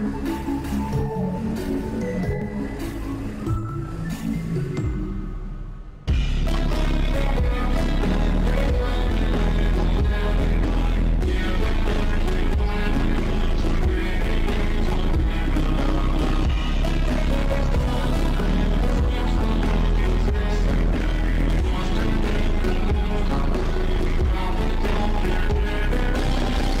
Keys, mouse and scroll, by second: 0.7-19.8 drag, 20.0-21.2 drag, 25.4-26.8 drag.